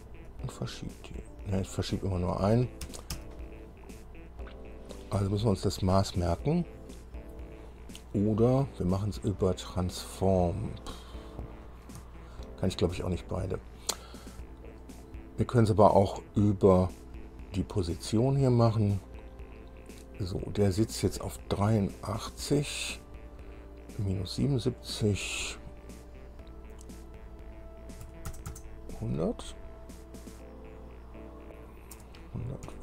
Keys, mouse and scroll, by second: 0.5 click, 2.0 right click, 3.1 Escape, 3.6 Escape, 11.9 click, 12.6 shift+click, 13.4 click, 16.4 click, 25.1 click, 28.3 KP_1, 28.6 KP_0, 28.8 KP_0, 32.2 BackSpace.